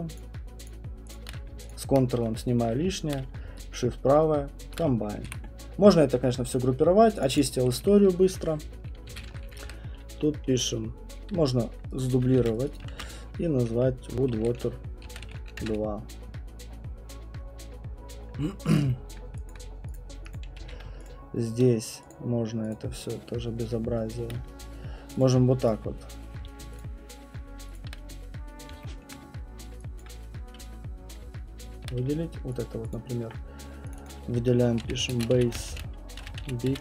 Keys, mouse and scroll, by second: 0.1 shift+click, 0.7 shift+click, 1.1 shift+click, 1.7 ctrl+click, 4.7 shift+right click, 5.3 shift+F1, 7.2 click, 7.3 click, 8.8-9.8 typing, 11.9 click, 12.1 click, 12.4 ctrl+c, 12.6 click, 12.7-15.0 typing, 12.7 click, 17.6 typing, 18.8 @, 18.8 BackSpace, 19.1 scroll, 19.5 alt+click, 19.9 click, 20.3 click, 20.6 alt+click, 20.6 q, 21.1 middle click, 21.1 shift+click, 21.1 shift+click, 22.1 shift+click, 22.7 shift+click, 24.4 middle click, 25.2 click, 25.7 click, 25.8 shift+click, 26.8 shift+click, 27.8 shift+click, 29.0 alt+middle click, 30.0 alt+click, 32.6 click, 32.9 alt+click, 33.9 click, 34.1 click, 34.2 alt+click, 34.5-36.8 typing.